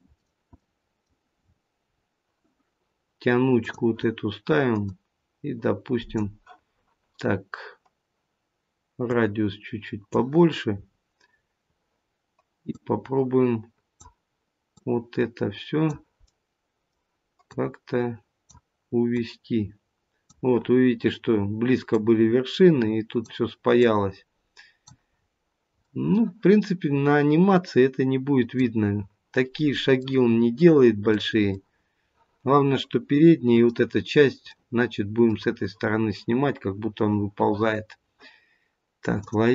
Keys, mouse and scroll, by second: 39.3 click.